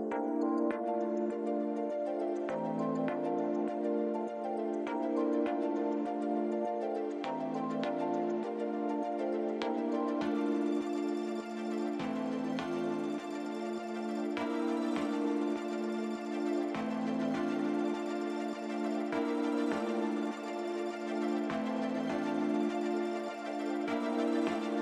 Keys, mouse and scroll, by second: 15.9-16.2 scroll down 4, 17.8 click, 19.6 shift+click, 20.9 click, 21.8 middle click, 23.0-23.3 scroll down 2.